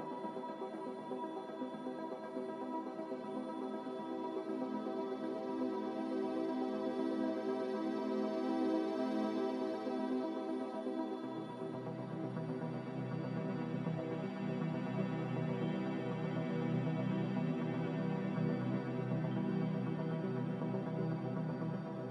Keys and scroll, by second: 1.3 z, 8.9 1, 9.0 5, 9.5 Return.